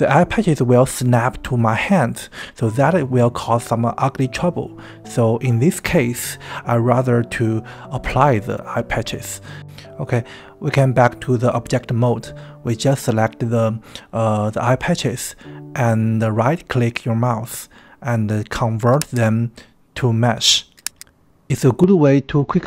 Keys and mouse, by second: 7.1-8.8 drag, 10.0 g, 14.2 Tab, 15.2-15.6 middle drag, 16.2 KP_1, 18.9-21.0 drag.